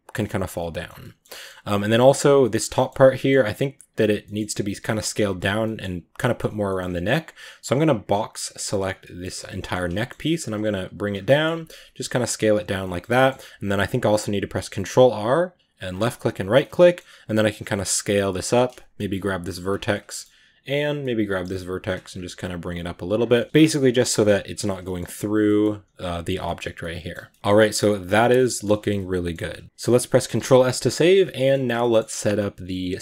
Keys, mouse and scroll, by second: 0.0 middle click, 0.7 scroll up 2, 0.8 middle click, 1.6 right drag, 1.7-2.1 middle drag, 2.1 Tab, 2.2-4.7 middle drag, 4.7 scroll up 1, 4.7-7.7 middle drag, 7.7 b, 8.0 middle click, 8.8 b, 8.9-10.3 middle drag, 10.3 g, 11.1 middle click, 11.4 s, 11.9 g, 12.7 middle click, 13.3 ctrl+r, 16.4 middle click, 17.0 s, 18.3 right click, 18.5 middle click, 18.9 g, 19.8-20.7 middle drag, 20.7 right click, 20.8 middle click, 21.3-24.0 typing, 22.6 right click, 23.2 middle click, 23.8 middle click, 24.6 scroll down 3, 24.7 middle click, 25.1 Tab, 25.3-25.7 middle drag, 25.7 right click, 26.3-27.3 middle drag, 27.1 a, 27.3 scroll down 3, 27.5-33.0 middle drag.